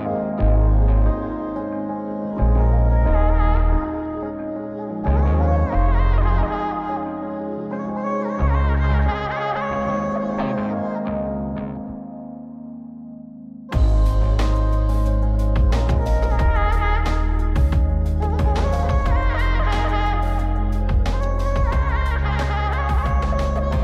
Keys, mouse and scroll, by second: 1.6 click, 3.3 click, 7.6 click, 8.1-8.8 drag, 11.8-18.1 drag, 19.8 click, 21.0-23.8 drag.